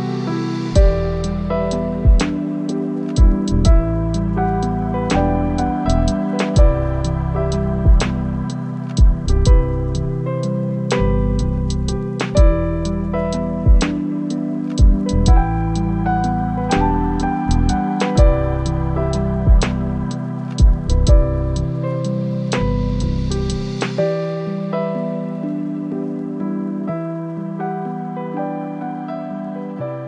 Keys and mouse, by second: 0.2 click, 0.9-1.6 middle drag, 1.8 click, 2.0 Tab, 3.2 middle click, 8.4 click, 9.6 g, 9.9 z, 15.0 a, 15.5 s, 16.0 y, 18.7 middle click, 20.2 click, 20.9 middle click, 22.0 click, 23.1-24.2 middle drag, 24.2 g, 24.6 z, 26.4 Tab.